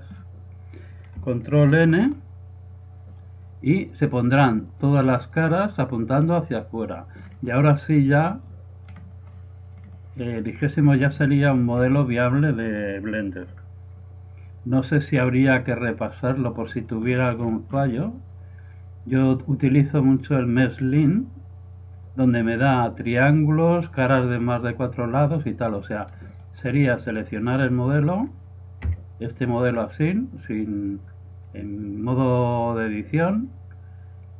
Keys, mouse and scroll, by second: 0.2-1.8 middle drag, 1.8 ctrl+n, 5.0 click, 5.2-6.6 drag, 6.0 right click, 6.6-10.9 middle drag, 10.9 z, 11.2-14.0 middle drag, 11.8 z, 16.2-18.1 drag, 17.7 middle click, 17.9 right click, 20.0-21.7 drag, 26.0-27.3 middle drag, 27.3-29.1 drag, 28.9 a.